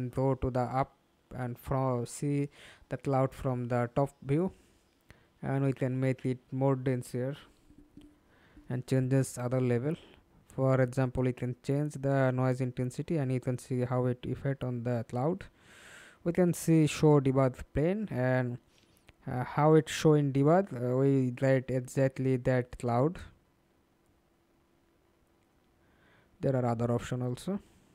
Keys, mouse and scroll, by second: 2.4-2.9 scroll down 2, 2.9-7.8 scroll down 1, 8.4-9.4 scroll down 3, 12.4-13.0 scroll down 2, 13.0-14.9 scroll down 2, 22.5-24.1 scroll down 21, 24.4-26.0 scroll up 13, 26.0-27.9 scroll up 4.